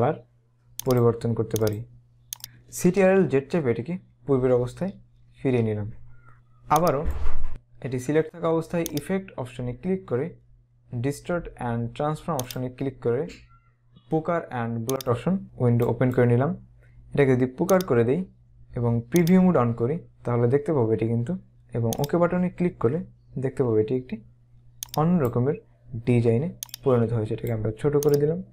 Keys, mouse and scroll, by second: 3.3-5.1 typing, 6.8 click, 9.1 click, 12.6 click, 15.1 click, 17.8 click, 22.1 click, 23.1 scroll down 1, 24.9 click, 26.7 click, 28.0 click.